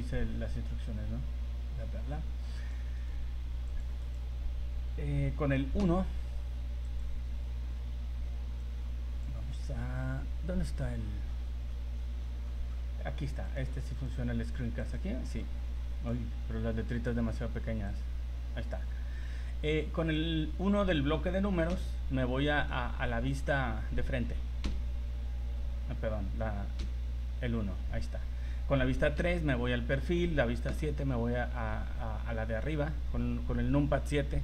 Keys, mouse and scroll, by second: 14.8 click, 15.4 click, 17.9 click, 19.7 click, 20.8 scroll up 5, 21.7 KP_1, 22.8 middle click, 24.6 KP_1, 24.6 KP_2, 26.8 KP_1, 29.2 KP_3, 30.7 KP_7, 31.8 scroll up 2.